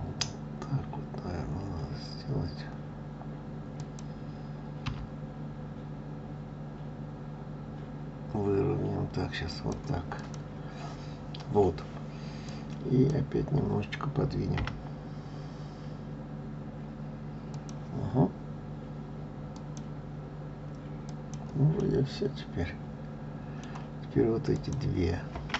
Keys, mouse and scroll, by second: 10.1 click, 12.4 click, 14.6 g, 19.5 click, 21.0 click, 21.8-24.5 middle drag, 24.5 click.